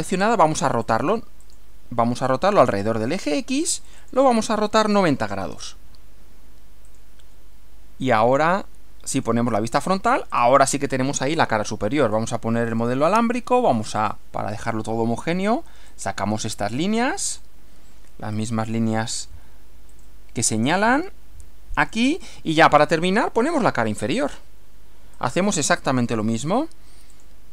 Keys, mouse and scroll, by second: 0.8 click, 1.5 click, 2.7 click, 3.7 click, 5.1-6.0 typing, 6.9 click, 9.2 click, 10.4 click, 12.1 click, 12.7 click, 14.0 click, 15.9 click, 17.2 click, 18.4 click, 19.9 click, 21.8 click, 22.6 click, 25.2 click, 27.1 click.